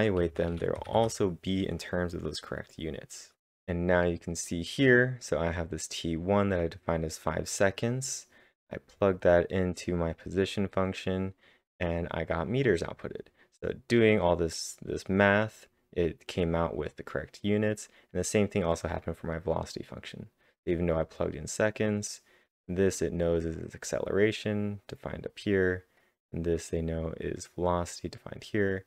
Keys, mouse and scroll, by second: 0.0-1.3 typing, 6.3-7.0 typing, 6.5 click, 7.2 click, 7.5 click, 8.1 click, 8.9 click, 9.4 click, 10.3 double click, 12.3-18.2 drag, 15.7-16.4 typing, 18.2-20.7 drag, 18.6-19.3 typing, 20.7 click, 21.4 click, 22.1 click, 22.7 click, 23.4 click, 24.9-26.6 drag, 26.6 click, 27.5 click, 28.4-28.8 drag.